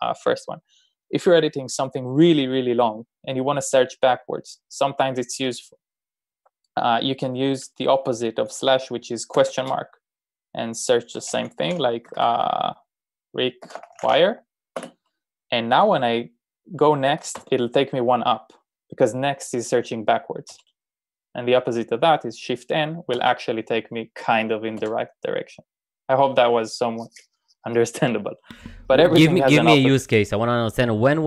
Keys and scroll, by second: 9.6 BackSpace, 13.4-14.6 typing, 15.2 Return, 17.4 n, 20.5 n, 23.2 shift+n, 25.0 shift+n.